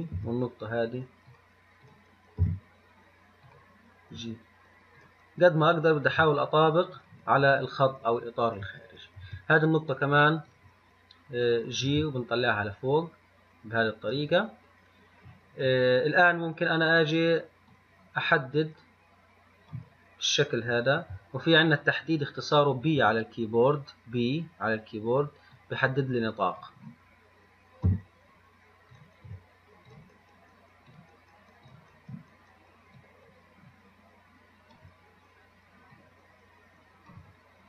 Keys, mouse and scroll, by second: 5.9 click, 33.8-37.6 drag.